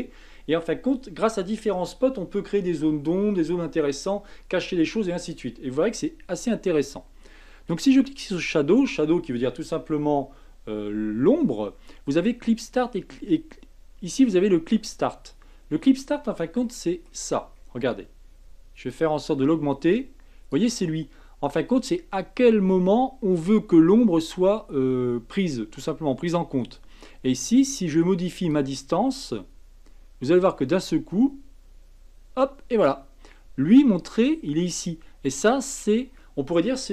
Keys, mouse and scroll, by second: 8.2 drag, 16.6-17.3 shift+middle drag, 17.3-18.4 scroll up 4, 18.9-21.9 drag, 28.5-31.5 drag.